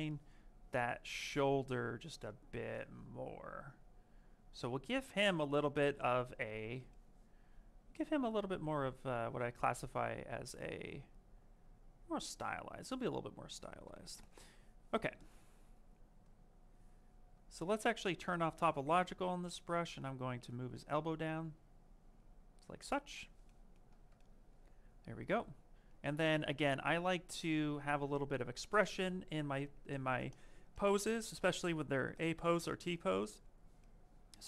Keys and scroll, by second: 5.4 q, 27.0 ctrl+shift+space.